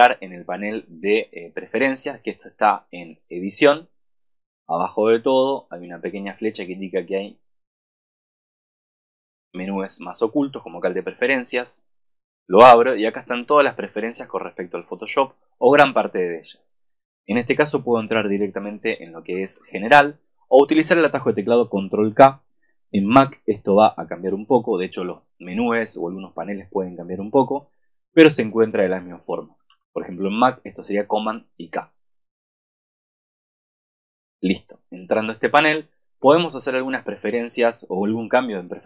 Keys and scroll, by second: 19.4 super+=, 29.8 super+-.